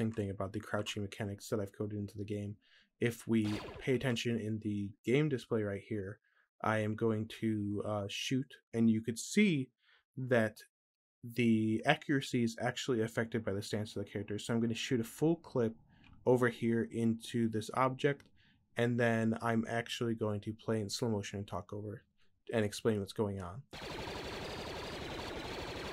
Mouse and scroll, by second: 3.2 click, 23.5-25.9 drag.